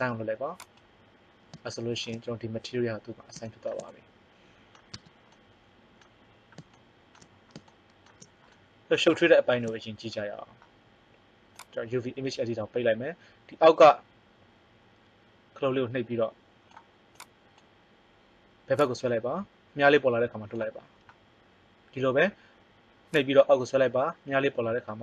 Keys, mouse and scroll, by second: 4.9 Tab, 11.5 click, 23.1 click.